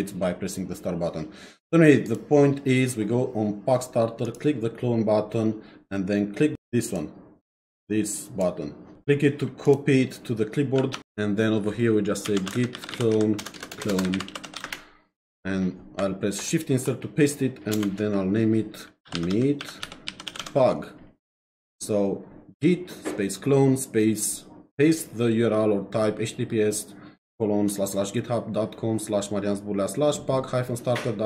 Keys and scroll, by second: 12.0-15.1 typing, 16.4 shift+Insert, 17.7 space, 18.8-20.9 typing.